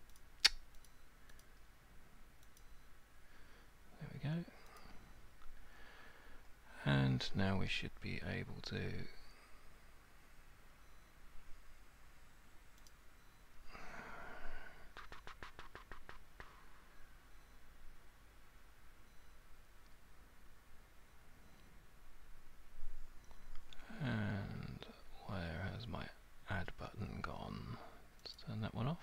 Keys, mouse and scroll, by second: 0.2 click, 0.9 click, 1.4 click, 2.6 click, 4.8 click, 12.9 click, 28.4 click.